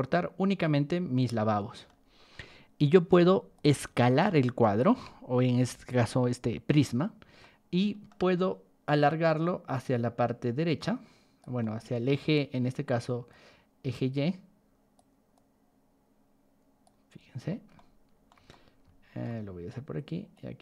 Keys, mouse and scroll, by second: 3.1 ctrl+1, 3.5 click, 4.1 ctrl+click, 4.8 Escape, 6.7 click, 7.3-8.0 middle drag, 9.0-11.3 drag, 11.6 middle drag, 13.2-14.9 drag, 15.3-16.8 drag, 17.1 scroll up 2, 17.4 middle click, 17.7-18.2 shift+middle drag, 18.5 shift+middle click, 20.3-20.6 drag.